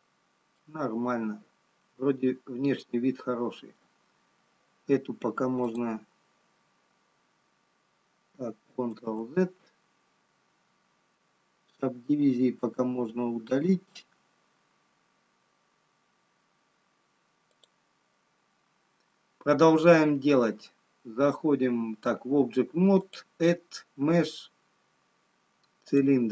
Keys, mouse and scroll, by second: 1.2 middle click, 5.9 click, 9.3 ctrl+z, 11.3-12.4 scroll down 3, 16.4-18.2 scroll down 4, 18.2 click, 19.2-20.2 scroll down 1, 20.2 scroll down 1, 23.1 click.